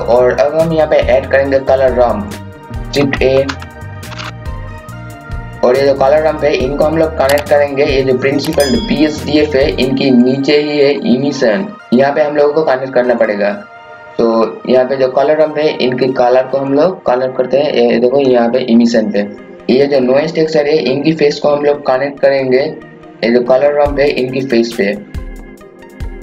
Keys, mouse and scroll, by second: 2.6 scroll down 1, 2.7 click, 3.3-4.6 typing, 3.8 click, 4.6 click, 11.3 scroll up 1, 11.8 scroll down 1, 11.9 scroll up 1, 13.2 click, 14.2-15.0 scroll down 1, 16.6-18.9 drag, 19.5 scroll up 1, 23.0-26.2 drag.